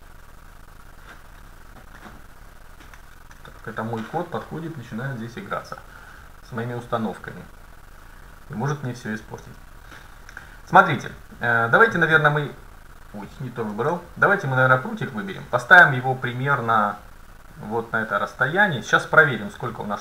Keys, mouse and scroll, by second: 12.3-14.2 drag, 13.8 ctrl+z, 14.4-16.6 right drag, 15.1-16.9 drag, 19.0-20.0 middle drag.